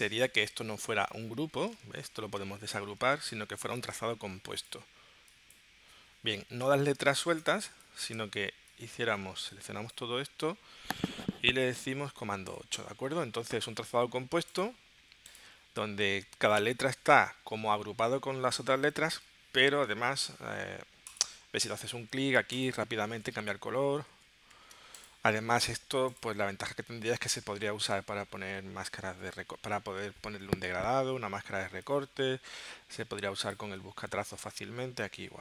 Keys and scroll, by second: 2.2 shift+super+g, 6.7 super+z, 7.0 space, 12.5 super+8, 24.1 super+z.